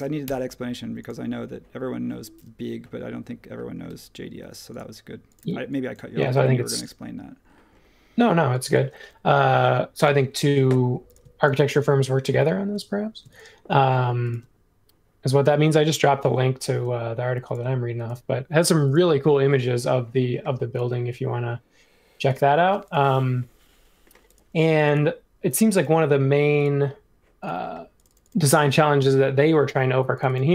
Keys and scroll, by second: 0.2 typing, 3.8 l, 5.4 e, 6.2 space.